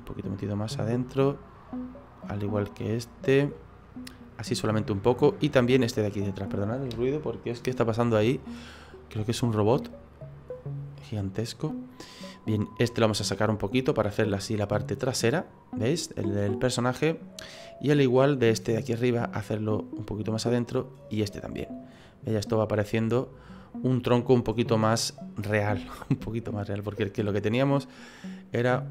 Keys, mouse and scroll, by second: 1.5 right click, 2.5 click, 3.5 middle click, 4.7 middle click, 5.7 right click, 6.1 middle click, 8.5 click, 10.9 middle click, 12.8 right click, 13.4 click, 15.1 middle click, 15.9-16.4 scroll down 4, 16.4 middle click, 17.1 middle click, 18.2 right click, 18.9 click, 20.3 right click, 20.9 click, 22.0 middle click, 25.4 scroll up 4, 25.8 shift+middle click, 27.5 right click, 28.2 click.